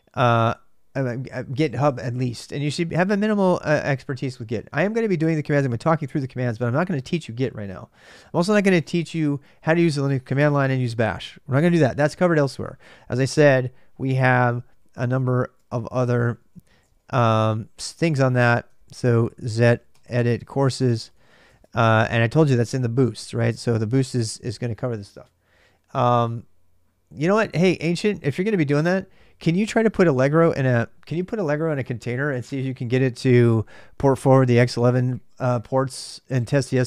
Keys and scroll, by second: 14.3 ctrl+a, 14.4 ctrl+a, 14.9-16.9 typing, 18.5-21.6 typing.